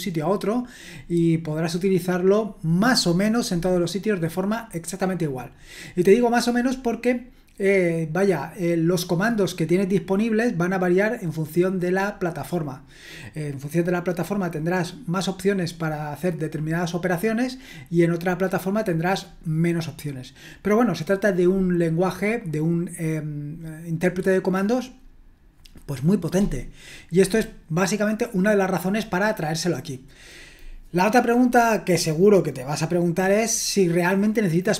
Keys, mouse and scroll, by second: 27.7-28.5 scroll down 1, 28.5-29.8 scroll down 1, 29.8-30.7 scroll down 1.